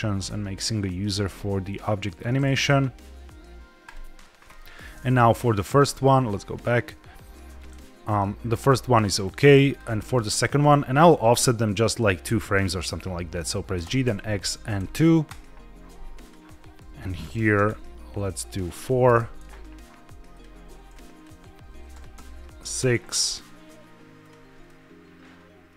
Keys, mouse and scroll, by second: 5.4 click, 6.0-6.5 drag, 7.9 click, 9.6 click, 10.2 a, 13.7 g, 13.9 x, 14.7 KP_2, 15.2 KP_Enter, 16.1 click, 16.7 a, 17.3 g, 17.4 x, 17.6 KP_2, 19.0 BackSpace, 19.0 KP_4, 19.3 KP_Enter, 20.2 click, 20.8-21.8 drag, 21.8 g, 22.0 x, 22.5 KP_6, 22.7 KP_Enter, 24.1-24.5 drag, 24.5-25.7 middle drag.